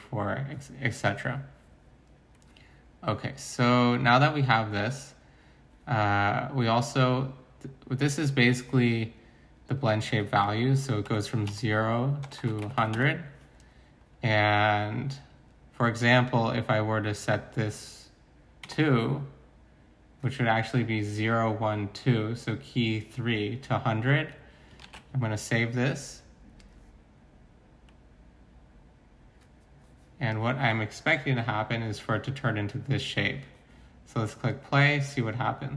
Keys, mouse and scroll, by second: 11.0-12.9 typing, 18.6 2, 24.8 ctrl+s.